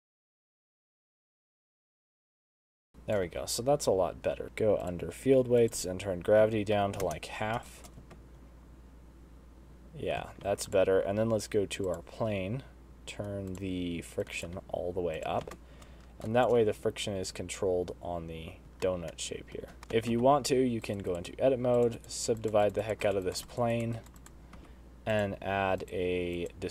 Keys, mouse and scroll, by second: 0.0-1.6 typing, 0.1 shift+right click, 0.2 shift+right click, 0.6 shift+right click, 0.8 shift+right click, 1.2 shift+right click, 1.4 middle click, 1.6 middle click, 1.6 scroll down 3, 1.6 shift+middle click, 1.8 shift+right click, 1.9 click, 2.1-2.5 click, 2.2 click, 2.3 click, 2.6 shift+right click, 2.8 space, 2.9 shift+middle click, 2.9 scroll down 3, 2.9 space, 3.3 shift+right click, 3.7 space, 4.4 click, 4.8 click, 5.2 click, 6.0 click, 8.1 shift+right click, 8.4 space, 10.9 space, 11.1 click, 12.4 click, 13.9 click, 14.7 click, 15.6 click, 15.9 space, 16.7 shift+right click, 19.6 middle click, 19.8 click, 20.4 space, 20.6 Tab, 21.3 right click, 22.2 right click, 22.6 right click, 23.1 right click, 23.5 right click, 24.0 right click, 24.4 right click, 25.1 Tab, 25.6 click.